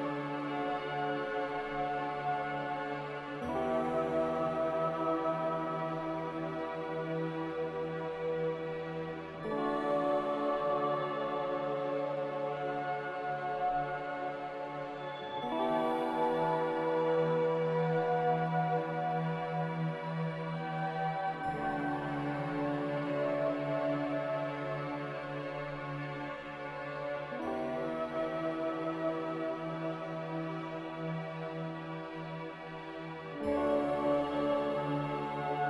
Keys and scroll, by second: 6.1 ctrl+c, 6.7 ctrl+r, 32.0 n.